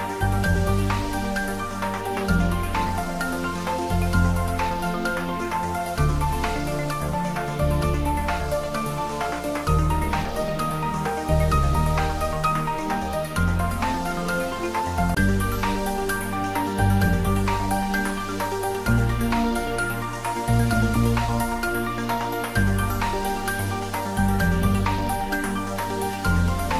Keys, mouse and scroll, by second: 1.1 click, 4.6 click, 8.2 Tab, 9.3 click, 9.8-10.4 scroll down 1, 10.4-12.1 middle drag, 12.3-13.1 scroll up 1, 13.1 middle click, 14.0 scroll up 1, 14.7-16.6 middle drag, 16.6-18.6 scroll down 1, 20.7 click, 23.3 click, 25.6 click.